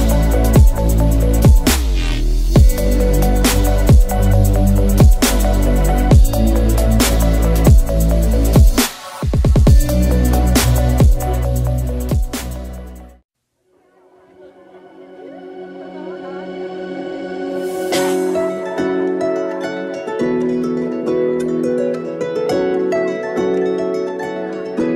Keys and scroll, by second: 1.0 ctrl+d, 12.9 ctrl+z, 13.7 Caps_Lock, 15.9 9, 16.0 Return, 16.0 0, 23.0 ctrl+z.